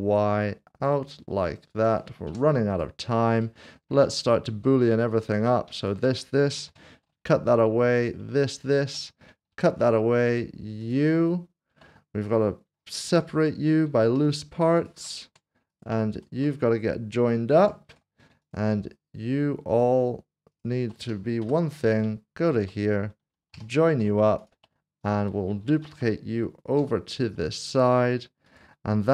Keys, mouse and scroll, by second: 2.2 click, 3.0 scroll down 1, 3.4 middle click, 4.1 shift+middle click, 5.1 shift+middle click, 5.2 click, 5.8 shift+click, 6.7 ctrl+shift+KP_Subtract, 8.0 click, 8.5 shift+click, 9.5 ctrl+shift+-, 10.3 click, 13.0 Tab, 14.2 p, 15.2 Tab, 15.7 click, 16.1 shift+click, 17.5 ctrl+shift+KP_Add, 18.4 click, 19.7 shift+click, 21.4 ctrl+j, 23.4 ctrl+s, 23.6 ctrl+shift+KP_Add, 24.4 click, 25.8-26.8 typing, 28.5 click.